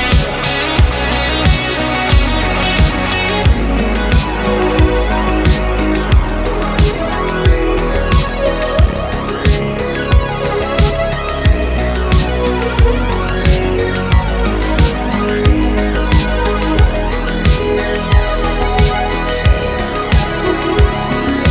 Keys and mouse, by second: 0.3 click, 1.0 shift+click, 1.8 ctrl+p, 3.5 middle click, 3.9 click, 4.7 shift+click, 5.7 ctrl+p, 7.9 middle click, 8.7-9.0 middle drag, 9.4-9.8 middle drag, 10.0 middle drag, 10.4 shift+middle drag, 11.3 middle click, 11.8 click, 12.0 middle click, 12.6 shift+click, 12.9 middle click, 13.6 e, 13.8 y, 14.1 x, 15.2 click, 15.4 middle click, 15.9 click, 16.1 middle click, 17.8 click, 19.0 click, 19.8-21.5 drag.